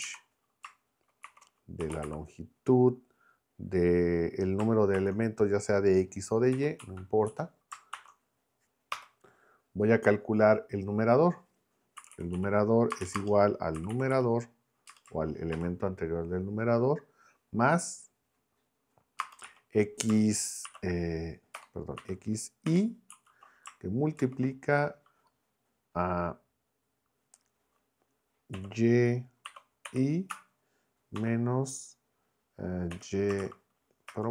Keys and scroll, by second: 1.2-2.5 typing, 5.0 shift+9, 6.5 x, 6.8 Right, 7.9 shift+;, 8.9 Return, 11.8-15.5 typing, 19.2 space, 19.4 x, 20.6 shift+[, 21.5 BackSpace, 22.0 [, 22.7 i, 23.1 Right, 24.2 shift+9, 28.5 y, 29.4 [, 29.9 i, 30.3 Right, 31.2 -, 32.9 y, 33.4 shift+a, 34.1 Return.